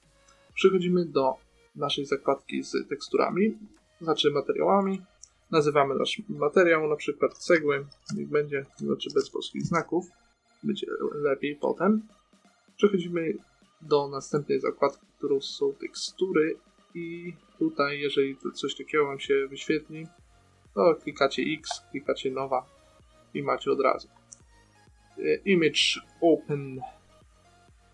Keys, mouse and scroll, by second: 1.3-4.4 drag, 5.1-7.1 drag, 9.1 BackSpace, 12.3 click, 14.6-16.0 drag, 16.0-20.0 middle drag, 20.0-23.7 drag, 23.7-25.9 middle drag.